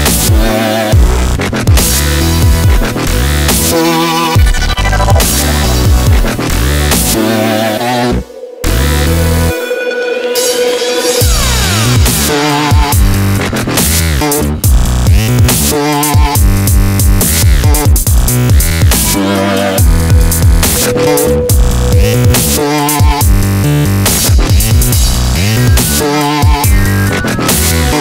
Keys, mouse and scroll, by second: 1.9 shift+d, 4.2 middle click, 5.5-8.4 right drag, 7.1-8.4 drag, 9.9-11.1 middle drag, 11.9 s, 13.9 click, 15.4 middle click, 17.0 middle click, 19.6 KP_5, 21.1 ctrl+shift+s, 21.1-24.3 drag, 24.4-26.8 right drag, 26.0-27.4 drag.